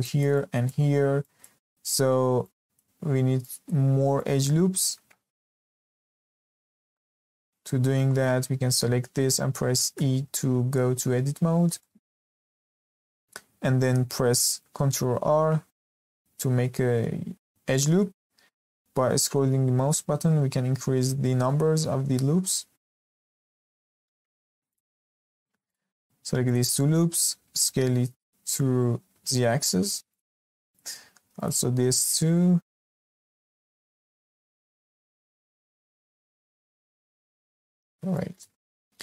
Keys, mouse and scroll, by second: 5.5 Escape, 6.1-6.4 scroll up 1, 6.4-9.4 shift+middle drag, 9.9 Tab, 11.4-11.7 scroll up 1, 11.7-13.0 shift+middle drag, 15.0 ctrl+r, 24.6 click, 25.6 alt+click, 26.4 alt+shift+click, 27.5 s, 30.6 alt+click, 31.3 alt+shift+click, 32.0 s, 36.3 click, 36.6-37.6 scroll down 2, 37.6-38.1 scroll up 1, 38.1-39.0 shift+middle drag.